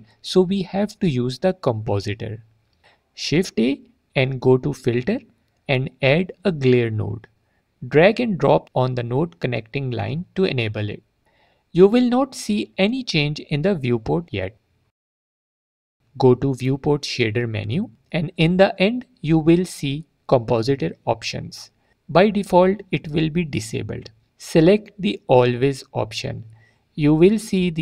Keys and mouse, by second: 4.2 click, 5.2 shift+a, 10.8 click, 17.8-27.1 drag.